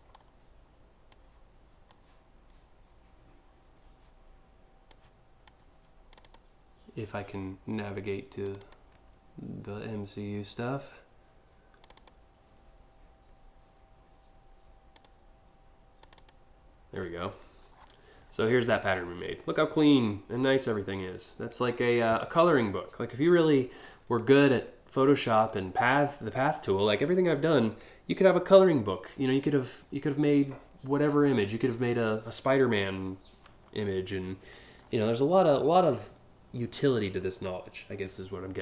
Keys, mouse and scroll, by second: 0.7 click, 4.5 click, 5.7 click, 8.1 click, 8.2 click, 11.4 click, 11.5 click, 14.5 click, 15.6 click, 15.8 click, 17.3 scroll down 1, 17.8 scroll up 1, 18.0 scroll down 2, 18.7-19.1 scroll up 1, 19.1-19.4 scroll down 2, 19.9-20.3 scroll up 2, 20.5 scroll down 1, 21.1 scroll down 1, 34.4-34.8 scroll up 3, 35.1 scroll down 1, 36.7 scroll down 1.